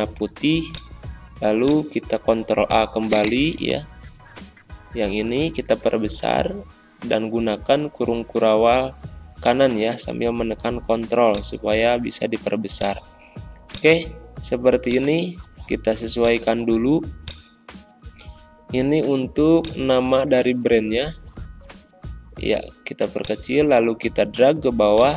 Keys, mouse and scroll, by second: 4.2 ctrl+b, 5.1 ctrl+a, 6.6 ctrl+], 8.8 ctrl+scroll up 1, 10.0-10.4 scroll up 1, 11.2 click.